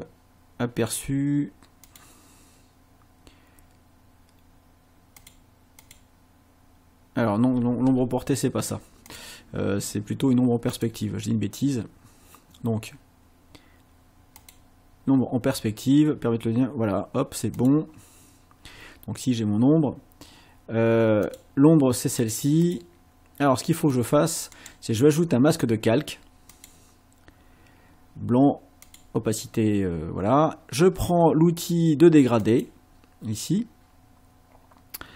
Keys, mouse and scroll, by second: 1.9 click, 5.2 click, 5.8 click, 9.1 click, 10.7 click, 14.4 click, 17.6 click, 21.3 click, 22.2 click, 22.6 click, 23.9 click, 24.6 right click, 26.5 click, 28.9 click, 32.4 click.